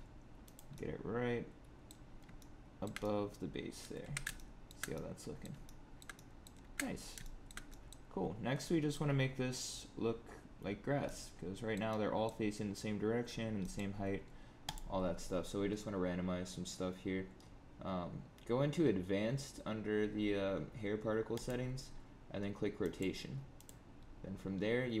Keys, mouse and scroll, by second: 0.7 middle click, 2.0 scroll up 5, 2.3 shift+middle click, 2.9 middle click, 3.9 Tab, 4.3 shift+middle click, 4.9 middle click, 5.6 shift+middle click, 6.1 middle click, 6.6-7.0 shift+scroll down 5, 7.1 middle click, 7.6 middle click, 8.6 middle click, 11.0 middle click, 11.8 middle click, 13.5 middle click, 14.6 click, 21.3 click, 22.8 click, 23.5 click, 23.9-25.0 scroll down 3.